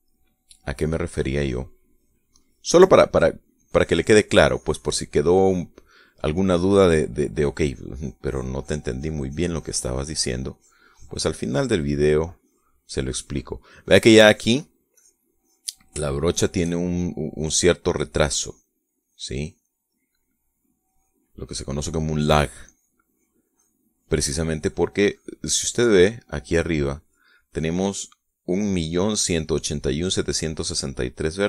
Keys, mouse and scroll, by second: 0.9-2.0 middle drag, 2.2 click, 2.6 click, 3.2 click, 4.4 click, 5.2 click, 6.0-7.2 drag, 6.5 right click, 7.4 click, 8.2-12.6 drag, 13.1 click, 13.8 click, 14.5 click, 15.7 click, 16.2 click, 16.9-17.9 shift+middle drag, 18.0 click, 18.7 click, 19.2 click, 19.6 middle click, 19.8 click, 20.2 click, 20.7 middle click, 21.6 click, 22.2 click, 22.8 middle click, 23.4 click, 23.9 click, 24.3 click, 24.7-25.8 drag, 25.9 click.